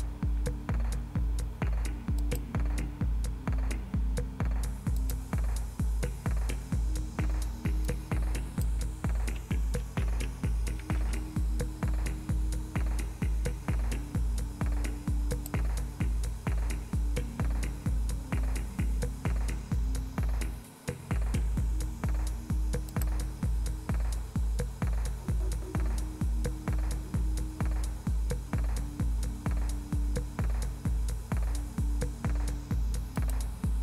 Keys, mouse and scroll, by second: 2.2 click, 5.0 click, 7.9 click, 9.8-11.4 typing, 15.3 click, 22.9 click, 33.2 click.